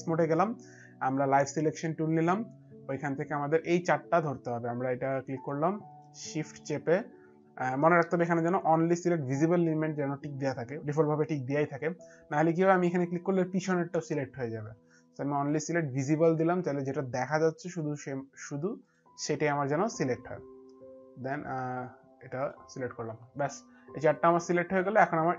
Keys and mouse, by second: 2.1 click, 5.9 click, 15.3 shift+click, 18.9 shift+click, 22.9 shift+click.